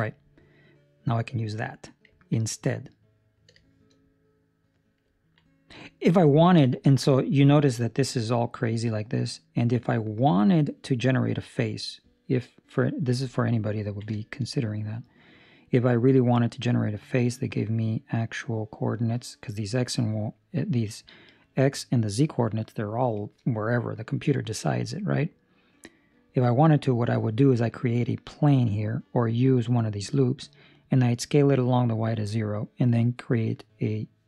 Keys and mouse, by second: 0.0 middle click, 0.5 middle click, 0.7 shift+middle click, 2.2 ctrl+middle click, 2.4 ctrl+middle click, 2.9 middle click, 3.3 ctrl+middle click, 3.5 shift+middle click, 3.8 shift+middle click, 3.9 middle click, 5.1 ctrl+middle click, 6.3 ctrl+middle click, 6.5 shift+middle click, 6.8 shift+middle click, 6.9 middle click, 9.2 middle click, 13.7 ctrl+middle click, 14.1 shift+middle click, 14.4 middle click, 18.0 middle click, 25.1 middle click, 28.7 middle click, 30.1 middle click.